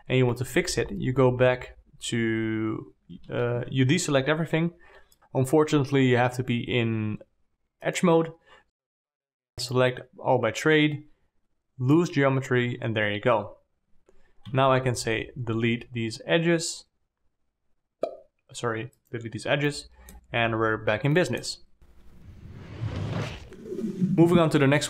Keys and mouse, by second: 1.0 alt+a, 4.0 alt+a, 6.6 2, 14.9 x, 20.1 alt+middle click, 20.8 1, 21.6 middle click, 22.5 1.